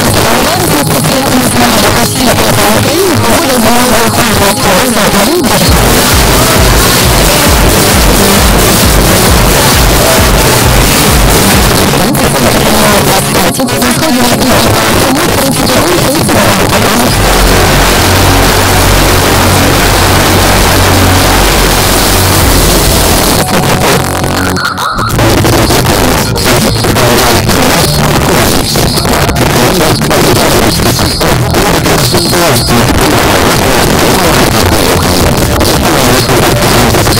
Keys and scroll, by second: 11.7 Page_Down, 23.2 Page_Down.